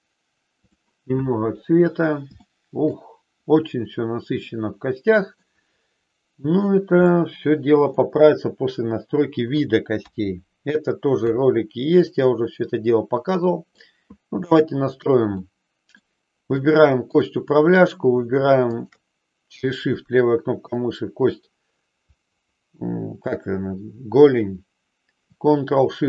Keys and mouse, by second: 1.1 click, 2.3 shift+middle click, 5.5-6.8 middle drag, 7.1 middle click, 9.9 KP_3, 13.1 middle click, 14.3 shift+middle click, 15.3 middle click, 16.6-17.8 drag, 18.6-19.9 shift+drag, 20.8 middle click.